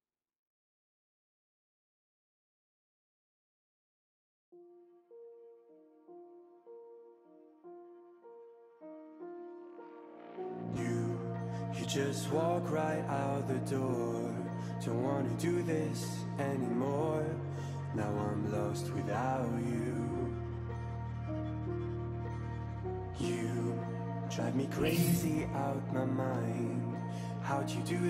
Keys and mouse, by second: 0.2 x, 0.6 click, 0.9 click, 1.6 x, 2.3 space, 2.6 click, 3.1 x, 3.1 click, 3.5 click, 3.9 click, 4.1 click, 4.9 click, 6.4 x, 6.5 click, 6.9 click, 7.2 click, 9.0 click, 9.8 x, 9.9 click, 10.6 click, 11.7 click, 12.1 click, 12.8 click, 14.3 click, 15.3 x, 15.5 click, 16.0 click, 16.8 click, 18.9 x, 19.8 click, 20.2 x, 20.3 click, 20.7 x, 20.8 click, 21.6 click, 21.8 x, 21.8 click, 22.2 x, 22.2 click, 25.8 ctrl+alt+shift+e, 26.6 click.